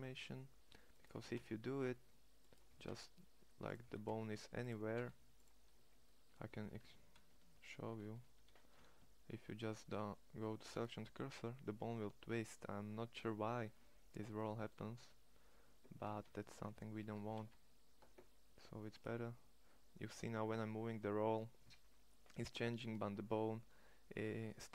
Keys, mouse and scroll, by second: 0.9 g, 2.4 g, 3.6 g, 4.5 g, 6.9 ctrl+z, 7.3 ctrl+z, 7.5 ctrl+z, 7.9 ctrl+z, 8.1 ctrl+z, 8.9 shift+s, 12.8 middle click, 16.0 ctrl+z, 16.8 g.